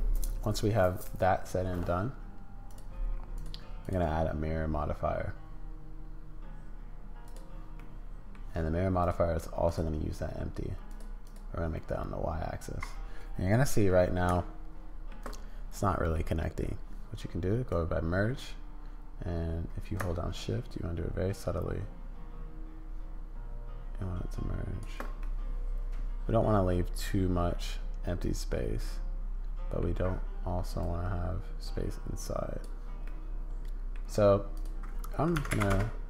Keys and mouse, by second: 3.4 click, 3.5 middle click, 3.8-7.4 drag, 7.4 middle click, 9.1 middle click, 10.9 middle click, 11.2 middle click, 11.8-13.9 middle drag, 14.5 shift+middle click, 16.1 middle click, 17.8-24.8 middle drag, 25.2-28.0 middle drag, 28.0 click, 28.3-29.8 middle drag, 30.8-32.7 drag, 33.0 click, 33.9 middle click, 34.6-36.0 drag.